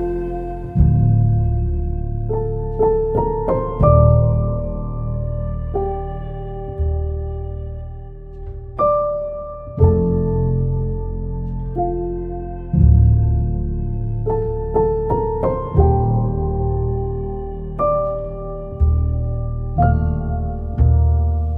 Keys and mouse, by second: 0.2 click, 0.8 o, 2.3 g, 4.1 click, 7.0 g, 8.9 z, 11.2 alt+z, 11.5 click, 12.0 z, 12.5 alt+z, 13.3 alt+z, 14.1 g, 15.6 click, 15.9 g, 16.9 click, 17.4 click, 17.8 g, 19.3 click, 20.7 g.